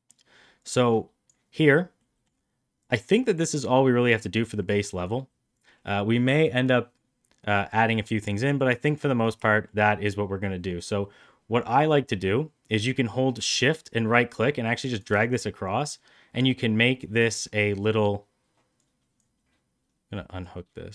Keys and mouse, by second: 0.5 click, 1.9 middle click, 2.7 click, 3.9 click, 4.9 click, 8.2 click, 9.4 shift+middle click, 14.1 shift+right click, 18.8-19.1 drag, 20.4-20.8 drag.